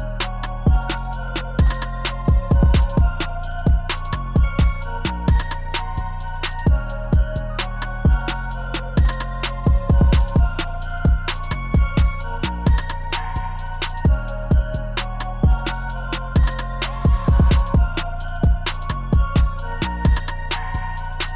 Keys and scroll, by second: 13.2 0.